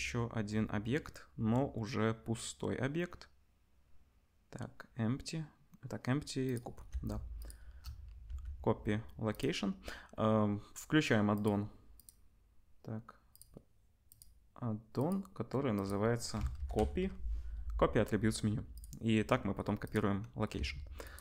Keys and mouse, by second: 7.3 shift+middle click, 8.2 ctrl+c, 11.4 middle click, 13.3-21.1 middle drag, 20.5-21.2 drag, 20.5 right click, 20.5 s.